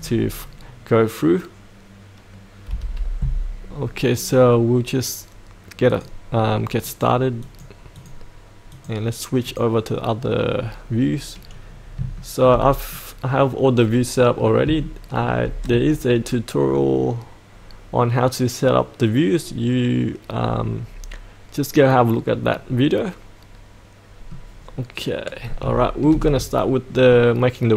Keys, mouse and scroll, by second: 2.7 F8, 5.9 click, 11.1-11.5 scroll down 1, 11.5-12.0 scroll up 1, 12.1 shift+middle click, 12.9 middle click, 13.2-14.6 middle drag, 14.8-24.4 shift+middle drag, 24.5-25.6 scroll down 1, 25.7-27.4 shift+middle drag.